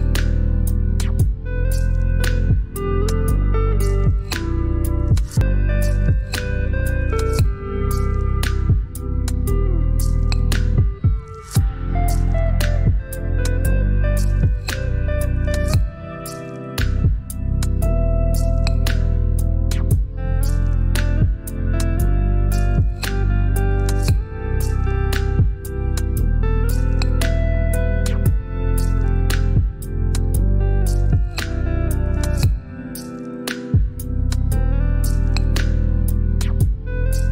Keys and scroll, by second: 10.4 ctrl+z.